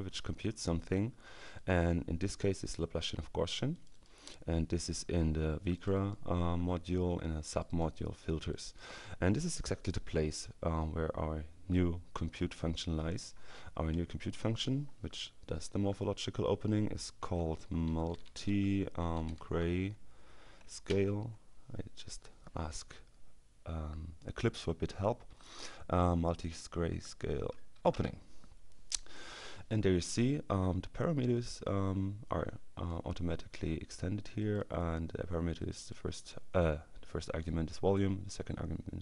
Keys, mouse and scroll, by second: 1.6 click, 3.8 click, 5.8 click, 7.6 click, 8.6 click, 13.7 Delete, 16.1-19.4 typing, 20.9 ctrl+space, 26.2 Down, 26.9 Down, 28.0 Return, 31.4-33.4 drag, 34.4 click, 35.6 click.